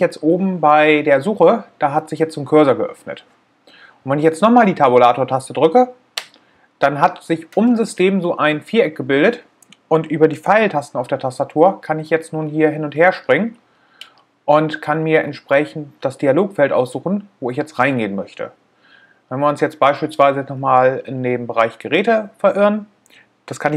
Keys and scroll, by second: 5.1 Tab.